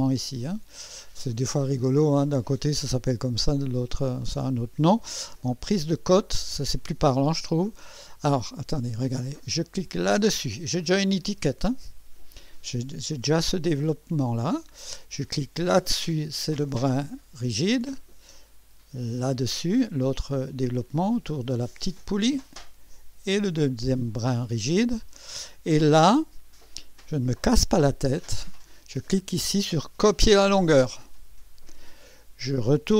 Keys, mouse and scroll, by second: 5.6 click, 9.9 click, 15.8 click, 19.2 click, 23.2 click, 30.1 click.